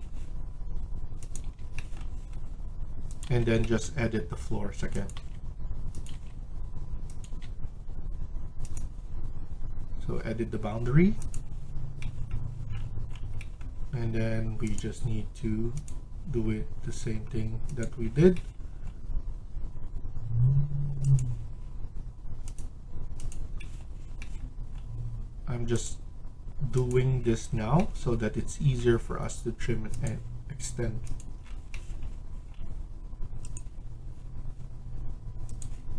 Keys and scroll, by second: 1.3 Delete, 3.2 Delete, 5.2 Delete, 6.0 Delete, 7.2 Delete.